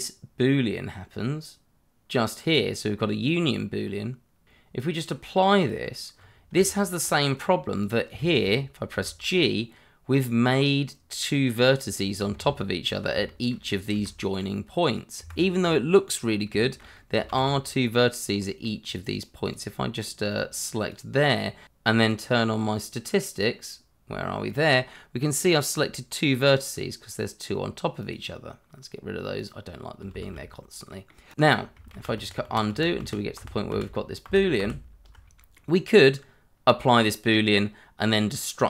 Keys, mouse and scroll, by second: 3.2 scroll down 1, 4.9 click, 6.1 scroll up 1, 6.5 Tab, 7.4 scroll up 1, 7.8 click, 8.2 shift+middle click, 8.9 g, 12.0 Escape, 12.9 click, 13.2 shift+middle click, 13.9 g, 15.2 Escape, 15.5 scroll down 1, 16.3 scroll up 1, 16.6 shift+middle click, 16.9 middle click, 17.3 shift+z, 17.7 scroll up 1, 18.4 middle click, 18.9 click, 20.5 double click, 22.0 click, 24.5 click, 28.0 click, 29.7 scroll down 1, 30.1 shift+z, 30.5 scroll down 1, 30.9 middle click, 31.3 click, 31.9 ctrl+z, 35.5 middle click, 36.1-37.8 scroll down 1.